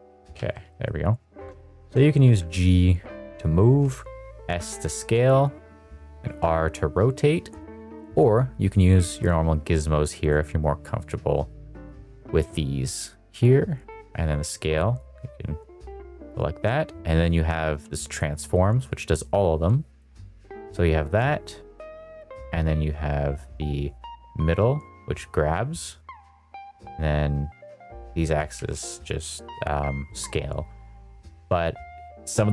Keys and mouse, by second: 0.0 middle click, 1.3 Escape, 1.3 s, 1.5 middle click, 1.7 shift+middle drag, 2.2 g, 3.6 Escape, 4.1 s, 5.6 Escape, 6.1 r, 7.4 Escape, 8.0 click, 8.6 click, 9.8 click, 10.9 click, 11.8 click, 13.8 click, 14.9 click, 18.0 click, 18.8 click, 21.1 click, 21.2 click, 23.9 click, 24.1 click, 26.8 click, 28.5 ctrl+z.